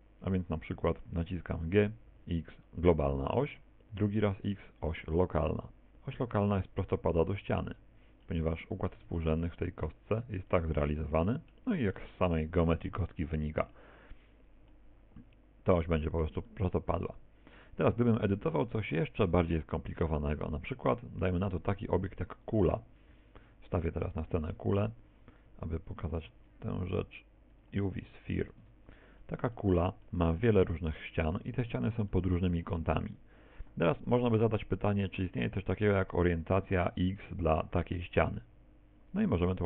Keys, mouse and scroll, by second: 1.7 g, 8.3 middle click, 9.0 Tab, 9.4 middle click, 12.0 middle click, 14.3 middle click, 16.5 middle click, 20.5 Tab, 21.0 Tab, 22.1 z, 22.5 click, 26.3 shift+a, 28.1 shift+middle click, 28.7 Tab, 28.9-29.8 scroll up 7, 29.6 middle click, 32.1 shift+middle click, 37.0 right click, 37.5 shift+right click, 37.9 shift+right click, 39.3 middle click.